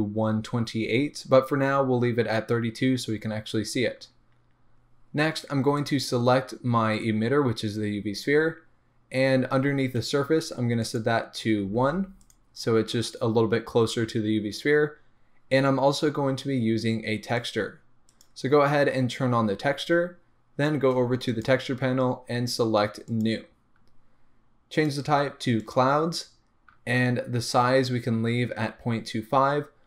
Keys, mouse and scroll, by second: 0.9-1.5 scroll up 1, 10.8-12.3 drag, 17.4 click, 18.1 click, 18.5-21.2 scroll down 1, 21.2 click, 23.0-29.8 drag, 29.2-29.8 scroll down 1.